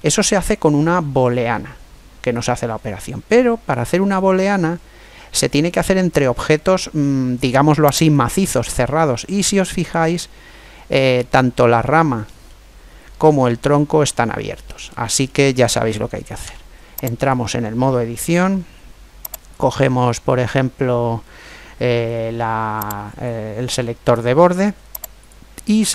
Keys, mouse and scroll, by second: 7.6-14.9 middle drag, 9.4-10.9 scroll up 1, 16.1 Tab, 19.2-21.0 drag, 22.8 right click, 25.0-25.9 drag.